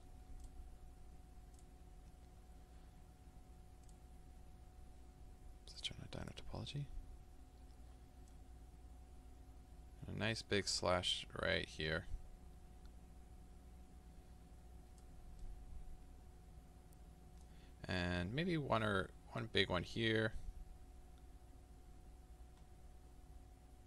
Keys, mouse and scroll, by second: 6.6-15.5 drag, 15.5-19.6 middle drag, 19.6-23.8 drag.